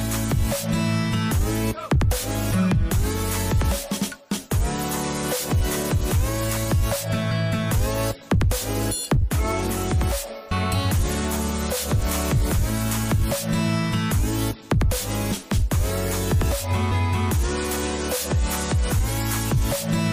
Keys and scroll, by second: 5.4 Down, 8.4 Down, 8.6 Left, 9.4 Up, 9.6 Right, 9.7 Up, 9.8 Right, 9.9 Up, 11.0 Down, 15.2 Down, 16.8 Down, 17.5 Up, 17.8 Left, 18.0 Up, 18.4 Left.